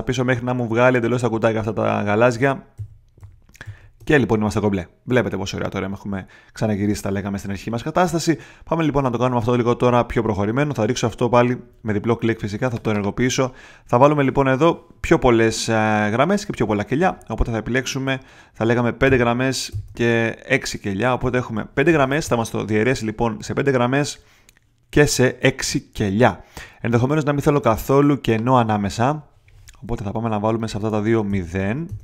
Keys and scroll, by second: 2.3 super+z, 19.0 5, 19.7 Tab, 21.2 6, 30.8 0, 31.2 Tab, 31.6 0, 31.8 Tab.